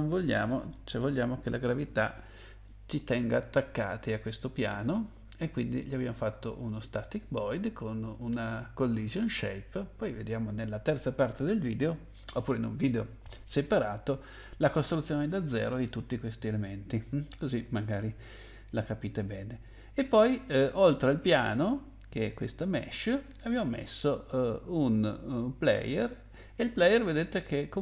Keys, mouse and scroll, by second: 24.1 click.